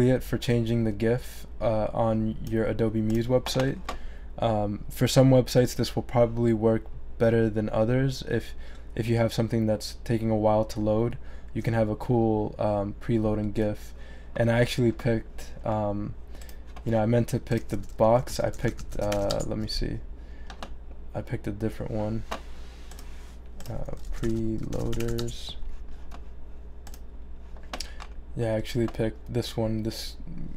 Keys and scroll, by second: 17.4-19.7 typing, 23.8-25.6 typing.